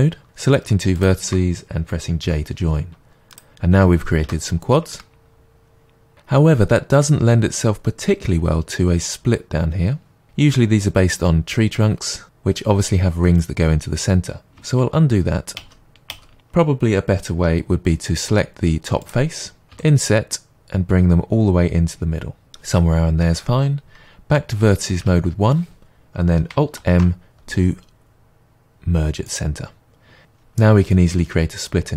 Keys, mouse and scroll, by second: 0.2 click, 0.9-2.2 shift+drag, 2.2 j, 3.3 click, 4.2 j, 4.9-19.0 middle drag, 14.8 ctrl+z, 18.3 3, 19.0 click, 22.5-24.9 drag, 25.0 1, 26.7 alt+m, 30.2-31.9 middle drag.